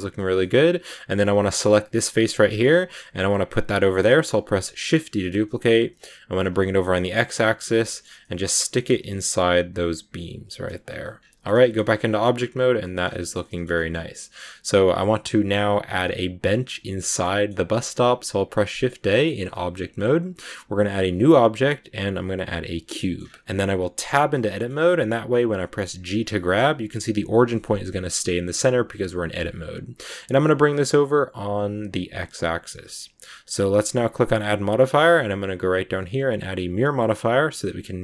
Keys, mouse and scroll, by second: 1.3 right click, 2.1-3.8 middle drag, 3.8 scroll down 2, 4.8 shift+d, 7.7 shift+middle click, 7.9-8.7 scroll up 4, 8.1 middle click, 8.7 middle click, 8.9 g, 10.7 scroll down 1, 10.8 scroll up 1, 10.8-11.3 scroll down 6, 11.3 shift+middle click, 11.5 a, 11.6-13.9 middle drag, 13.9 scroll up 1, 14.2-16.9 middle drag, 16.9 shift+scroll up 1, 16.9 shift+middle click, 17.8 shift+a, 22.9-23.9 scroll up 2, 22.9 middle click, 23.9 Tab, 24.4-25.9 shift+middle drag, 25.9 g, 34.0-37.0 drag.